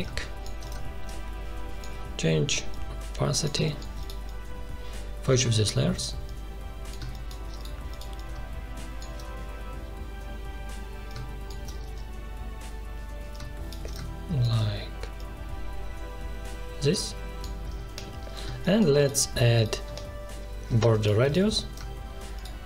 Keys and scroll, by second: 3.5 space, 7.0 space, 11.8 ctrl+z, 18.4 space.